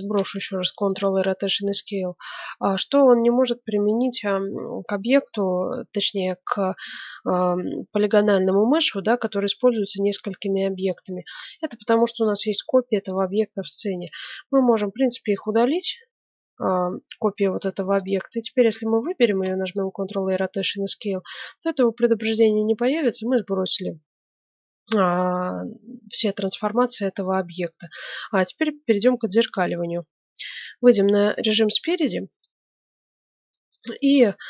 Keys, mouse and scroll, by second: 0.0 ctrl+a, 10.0-10.4 scroll down 1, 10.4-13.0 middle drag, 13.0-15.8 right drag, 15.1 x, 15.8 middle click, 17.9-19.2 right drag, 19.2 ctrl+a, 20.3-22.4 middle drag, 25.9-27.9 middle drag, 30.5 KP_1, 30.9 middle click, 31.7-34.4 middle drag.